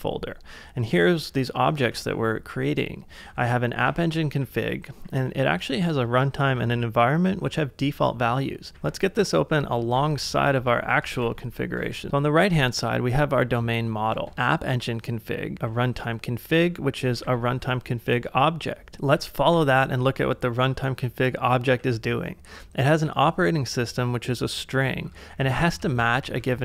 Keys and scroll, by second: 0.9-2.3 typing, 3.4-6.4 typing, 9.0 ctrl+w, 10.0 ctrl+w, 11.2 ctrl+w, 12.1 ctrl+w, 14.1 space, 15.5 j, 16.8 e, 17.0 e, 17.2 e, 19.5 shift+8, 21.6 j, 25.0-26.6 typing.